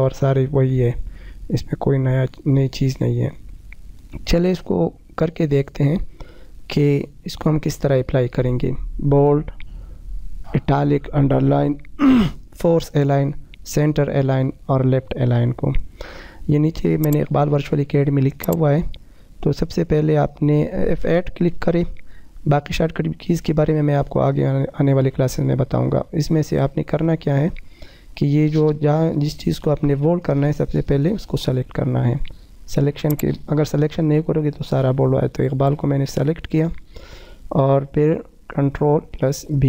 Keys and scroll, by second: 13.4 F4, 29.8 F8, 38.7 ctrl+b.